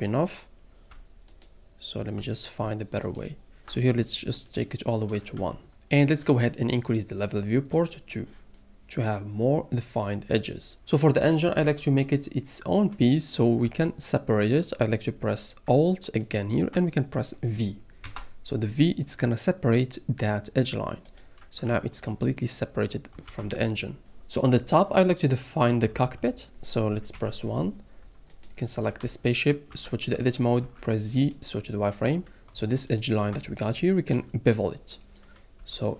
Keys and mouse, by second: 3.1 alt+click, 4.5 click, 5.4 Tab, 7.9 click, 8.5 click, 13.6 Tab, 16.2 alt+click, 18.0 v, 21.6 Tab, 23.2 alt+a, 24.6 click, 27.1 KP_1, 29.7 Tab, 30.6 z, 32.9 alt+click, 35.6 z.